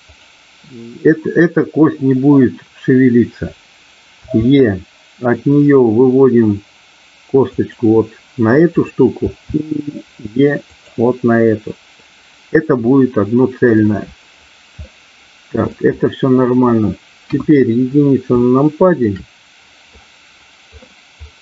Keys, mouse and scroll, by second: 0.0 click, 4.2 e, 7.5 click, 9.2 e, 10.6 click, 12.9 middle click, 14.9 middle click, 17.2 KP_1, 18.4 middle click.